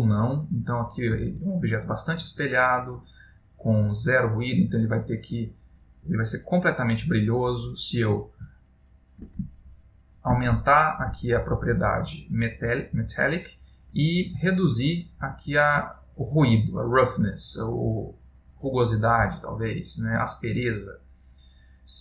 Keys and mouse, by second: 3.5 click, 6.3 middle click, 7.4 middle click, 8.7 ctrl+middle click, 9.7 shift+middle click, 10.8 ctrl+middle click, 15.5 click.